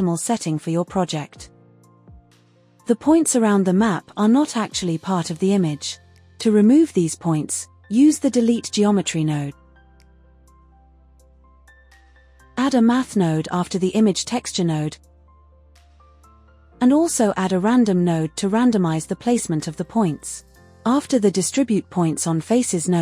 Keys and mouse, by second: 0.0-6.3 drag, 7.0-8.2 drag, 11.5 shift+a, 16.0 click, 16.9 shift+a, 19.5 click, 20.0 shift+a.